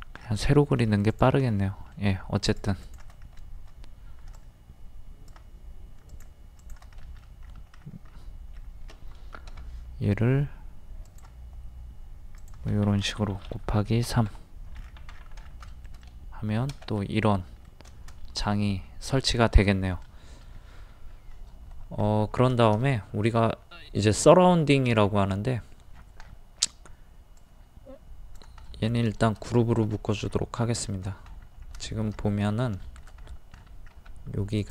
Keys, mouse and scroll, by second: 0.4 scroll up 1, 0.5 middle click, 1.1 click, 1.5 middle click, 2.5 click, 4.4 click, 6.1 shift+click, 6.6 shift+click, 7.0 middle click, 7.5 scroll up 1, 9.5 m, 12.4 click, 14.1 KP_3, 14.8-20.5 scroll down 1, 20.5-20.9 scroll up 1, 21.5 middle click, 22.0-22.4 scroll up 1, 22.5 middle click, 24.4-24.9 scroll down 1, 25.0-25.3 scroll up 1, 25.9 scroll down 1, 27.4 click, 28.6 middle click, 29.2 shift+middle click, 30.8 shift+middle click, 31.3-31.7 scroll up 1, 31.8 shift+middle click, 32.2 scroll down 1, 33.2 shift+middle click, 33.3 scroll up 1, 34.0 scroll up 1, 34.6 click.